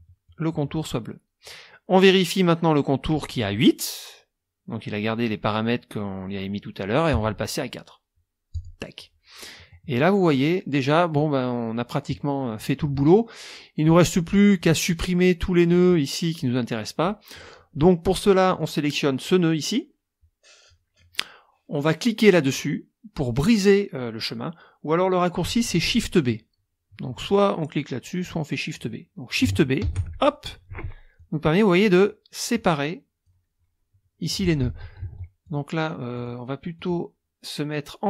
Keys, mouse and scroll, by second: 7.1 right click, 8.5 click, 9.5 click, 13.8 click, 15.7 click, 17.3 click, 18.5 click, 29.8 shift+b, 31.1 click, 32.5 click, 34.6 ctrl+z, 35.4 ctrl+click, 36.1 click, 36.7 click.